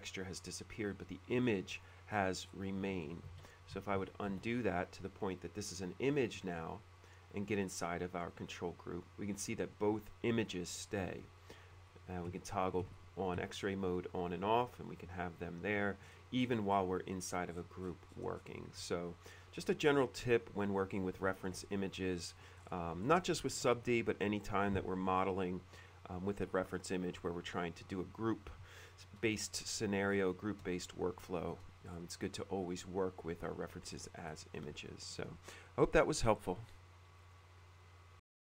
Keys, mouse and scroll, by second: 0.6-0.9 scroll up 1, 2.2-2.8 scroll up 2, 3.3 ctrl+z, 4.1 ctrl+z, 4.4 ctrl+z, 7.7 click, 7.9 click, 8.4 click, 8.6 click, 11.4 F3, 11.8 F3, 12.5 F3, 13.0 F3, 13.5 F3, 16.2-18.3 middle drag, 18.5 middle click, 19.7 click, 20.5 click, 21.7 ctrl+d, 21.7 F3, 22.3 middle click, 22.7 middle click, 23.1-23.5 scroll up 1, 23.4 shift+middle click, 30.2 scroll up 1, 30.4 middle click, 31.0 shift+middle click, 32.0-32.3 scroll up 2, 32.9-33.2 scroll up 2, 34.0-34.7 scroll up 4, 35.0 shift+middle click, 37.4 click, 38.3 click.